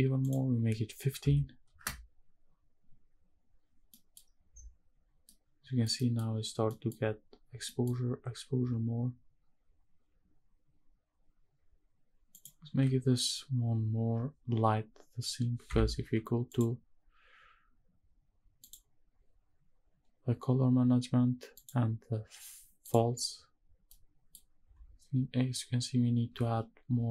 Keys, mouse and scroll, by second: 0.2-1.8 drag, 3.9 middle click, 4.3-4.7 scroll down 3, 5.2 middle click, 5.5 scroll down 2, 5.9 middle click, 6.2-7.1 scroll up 5, 6.9 middle click, 7.6 middle click, 12.3-15.7 drag, 16.5 click, 18.6 click, 21.5-22.9 drag, 23.9 middle click.